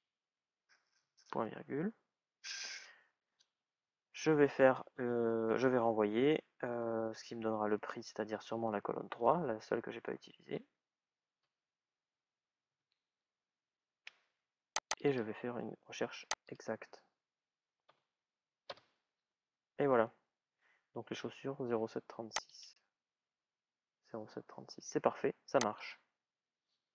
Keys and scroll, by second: 10.5 shift+", 18.5 Return.